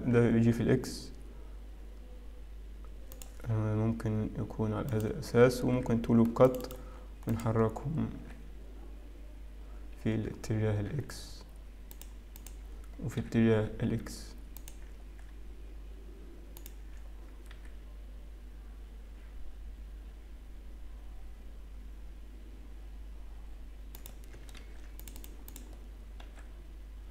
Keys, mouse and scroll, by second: 0.2 g, 6.5 ctrl+r, 6.9-8.3 scroll up 2, 8.3 click, 8.3 g, 14.3 click, 14.3 g, 26.4 ctrl+r, 26.4 click, 26.4 g.